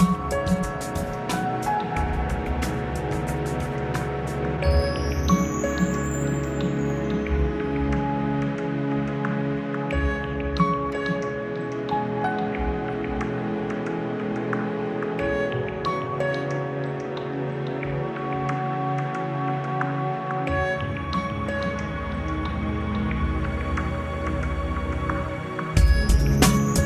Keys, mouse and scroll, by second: 0.1-1.6 middle drag, 3.2 click, 5.7 click, 8.8 click, 11.1 click, 13.0 click, 14.0 click, 14.9 click, 16.0 click, 17.1 ctrl+alt+p, 20.3 click, 26.0 ctrl+alt+p.